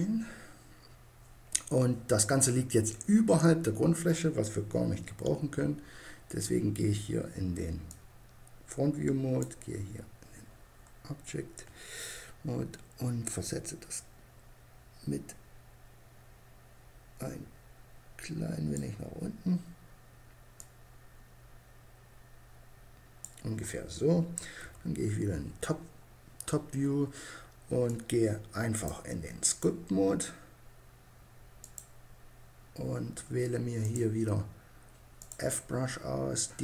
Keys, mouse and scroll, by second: 4.7 KP_1, 8.9 click, 10.2-12.8 middle drag, 12.8-14.4 drag, 20.0-21.7 drag, 24.0 KP_7, 33.2-35.0 drag.